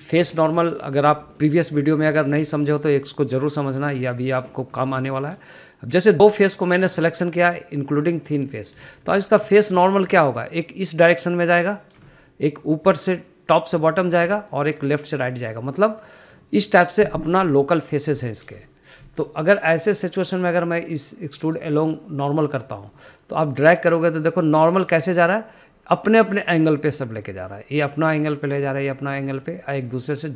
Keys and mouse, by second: 0.4 shift+middle drag, 0.7-1.0 middle drag, 1.4 shift+middle click, 1.8 middle click, 2.3 shift+middle click, 2.6 shift+middle click, 2.9 middle click, 3.3 shift+middle click, 3.6 middle click, 3.9 shift+middle click, 5.3 shift+middle click, 5.9 middle click, 6.3 shift+middle click, 7.1 click, 7.8 shift+click, 8.2 middle click, 9.2 shift+click, 9.8 middle click, 10.1 shift+middle click, 10.4 middle click, 10.8 shift+middle click, 11.0 middle click, 11.5 shift+middle click, 13.0 middle click, 13.3 shift+middle click, 15.2 shift+middle click, 15.5 middle click, 16.7 middle click, 17.6 shift+middle click, 19.5 shift+middle click, 19.9 middle click, 20.4 shift+middle click, 21.5-23.9 drag, 24.2 middle click, 25.1 click, 28.4 middle click, 29.6 middle click.